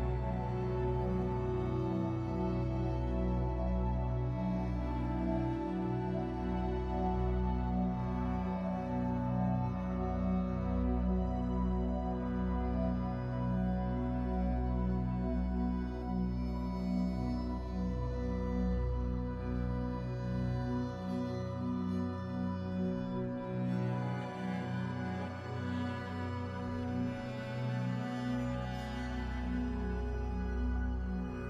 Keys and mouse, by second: 0.9-3.5 drag, 1.8 r, 2.7 r, 3.5 alt+a, 3.9-5.7 drag, 4.1 r, 5.6 g, 5.9-8.0 middle drag, 6.3 g, 6.7 r, 7.0 g, 8.3-10.2 middle drag, 8.4-13.9 typing, 10.1 click, 10.9 middle click, 11.3 click, 12.1-13.8 middle drag, 14.2 click, 14.4 ctrl+2, 15.8-17.7 drag, 16.4 alt+a, 17.1-22.3 typing, 17.7 middle click, 18.1-20.9 drag, 20.5 ctrl+z, 22.0 ctrl+z, 22.0 click, 22.9 alt+a, 24.9 r, 25.3 r, 25.4 middle click, 26.3 click, 26.3-31.3 typing, 28.2 click, 28.5 alt+a, 28.8 middle click, 29.1 click, 29.9 middle click, 31.0 click.